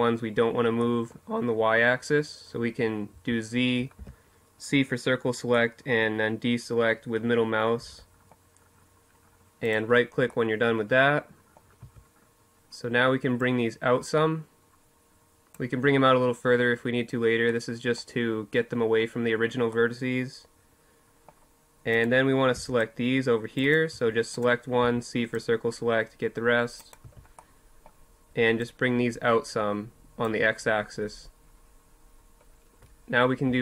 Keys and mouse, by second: 1.8 z, 2.7 c, 8.4-10.0 drag, 10.5 z, 19.0 middle click, 20.6-22.7 drag, 21.3 c, 22.7 z, 23.1 click, 23.5 c, 25.8 z, 27.3-29.3 drag, 32.2 alt+h, 33.4 a.